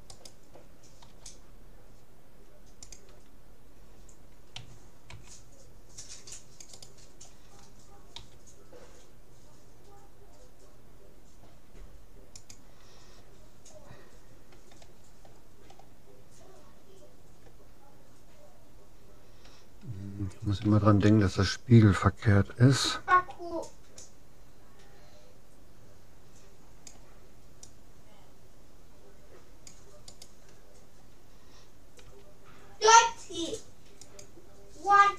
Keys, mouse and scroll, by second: 0.4-2.0 right drag, 1.2 g, 4.6 a, 5.2 c, 8.2 g, 15.7-16.8 middle drag, 16.8-17.8 scroll up 1, 17.8-18.8 middle drag, 20.6 a, 23.2 c, 32.0 s.